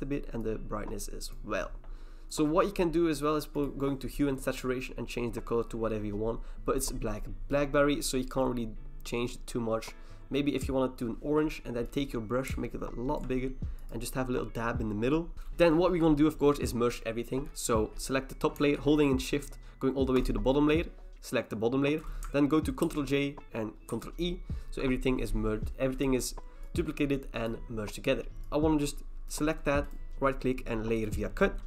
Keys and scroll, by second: 22.9 ctrl+j, 23.9 ctrl+e.